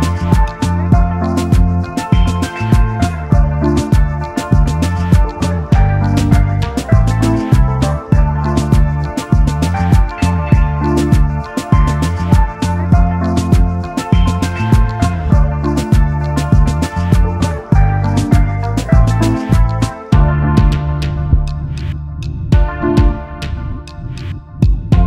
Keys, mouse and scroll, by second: 5.6-5.9 alt+scroll down 1, 7.5 alt+scroll down 1, 7.7 alt+scroll up 1, 8.2-8.6 alt+scroll down 1, 9.6 space, 11.1 double click, 11.6 alt+scroll down 1, 12.8-13.2 alt+scroll up 1, 13.5 alt+scroll down 1, 14.7 space, 14.8 double click, 15.3 space, 20.4 double click, 20.9 alt+scroll up 1, 21.7 typing, 22.8 alt+shift+click.